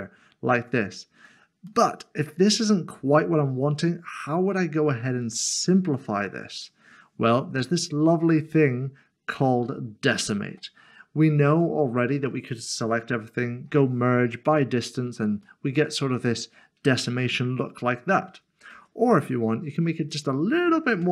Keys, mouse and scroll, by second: 1.7 middle click, 11.5 Tab, 13.7 Tab, 14.3 click, 15.6 middle click, 18.7 ctrl+z, 20.1 click, 21.0 Tab.